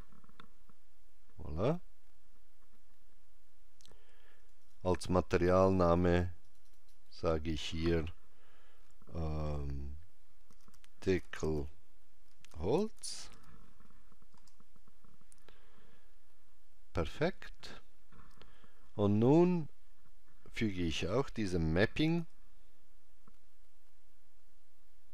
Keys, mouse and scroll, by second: 4.4 click, 22.0 shift+a.